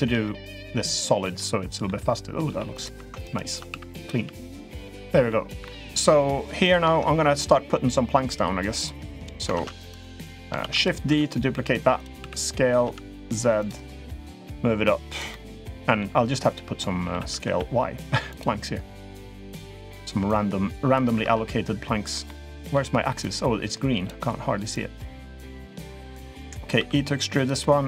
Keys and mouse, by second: 1.0 middle click, 2.2 g, 3.4 s, 3.9 g, 4.5 middle click, 5.3 3, 5.4 middle click, 6.4 click, 7.1 middle click, 8.5 click, 9.3 ctrl+z, 9.7 click, 10.4 shift+d, 10.8 s, 12.0 s, 13.9-15.0 drag, 15.1 middle click, 16.8 s, 19.2 middle click, 20.1 click, 21.0 ctrl+z, 22.0-22.5 middle drag, 23.0 click, 24.5 click, 26.5 e, 27.4 middle click.